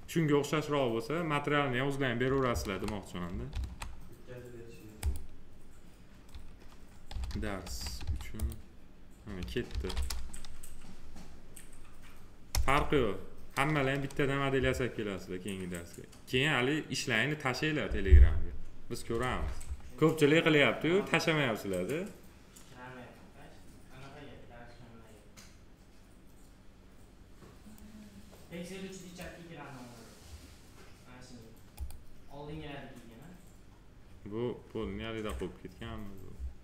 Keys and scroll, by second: 2.4 ctrl+a, 3.4 ctrl+c, 7.0 d, 9.6 ctrl+v, 12.4 Return.